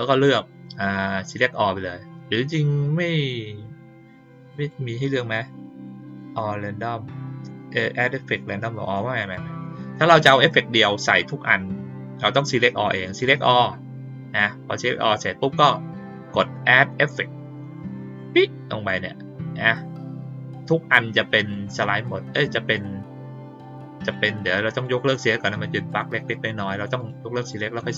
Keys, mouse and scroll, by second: 4.5 click, 9.1 click, 13.1 click, 18.1 click, 21.3 click, 21.8 click, 24.0 click, 24.7 click, 25.1 click, 25.8 click, 26.4 click, 26.9 click, 27.3 click, 27.7 click.